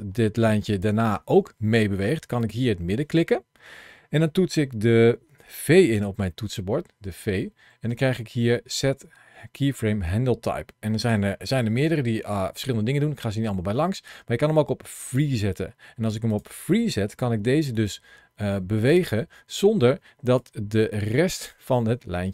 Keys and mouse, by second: 7.7 v, 16.1 click, 16.9 g, 18.7 click, 20.0 ctrl+shift+a, 20.0 shift+c.